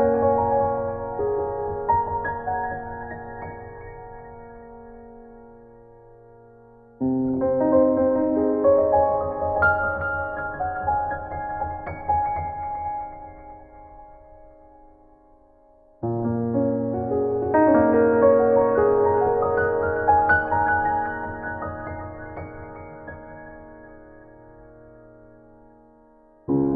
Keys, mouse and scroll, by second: 0.8 click, 1.4 click, 1.8 click, 2.5-2.8 scroll down 5, 2.7 scroll up 4, 3.4 click, 4.4 scroll down 1, 4.8 click, 5.4 scroll down 1, 7.0 click, 10.3 click, 11.2 click, 12.2 scroll down 1, 12.9-13.6 scroll down 4, 13.5 click, 14.3 scroll down 1, 14.9 scroll up 2, 15.6 scroll down 1, 16.2 scroll down 4, 16.3-17.0 scroll up 4, 17.5 click, 21.2 middle click, 22.0 scroll up 2, 22.9 middle click, 23.4 middle click, 23.7 middle click, 25.3 scroll up 1, 25.6 middle click, 26.2 scroll up 1.